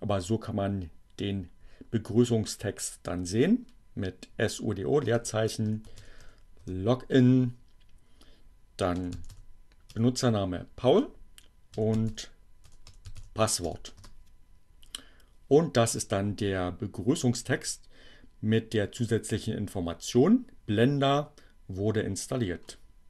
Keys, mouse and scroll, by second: 2.9 space, 5.2-6.7 typing, 7.7-8.8 typing, 9.9 l, 10.5 Return, 11.1-13.7 typing, 18.7-22.7 drag.